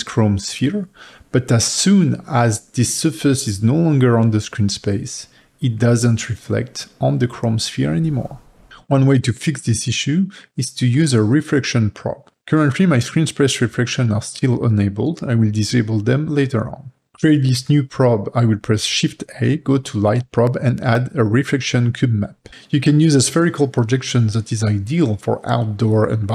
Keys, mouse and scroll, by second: 0.8-4.3 middle drag, 4.3 g, 6.2-8.4 middle drag, 8.4 middle click, 8.5 middle click, 8.7-12.6 ctrl+middle drag, 12.6 click, 13.2 g.